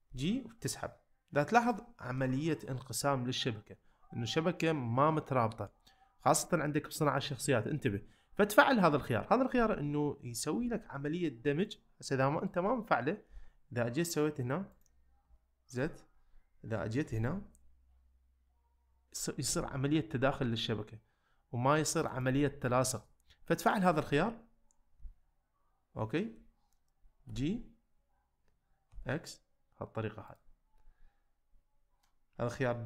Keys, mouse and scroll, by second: 0.1 g, 1.6 click, 8.9 click, 10.6 g, 13.3 g, 15.2 z, 17.1 g, 22.1-25.0 right drag, 25.0 z, 27.3 g, 28.9 x, 30.3 click, 32.0 middle click.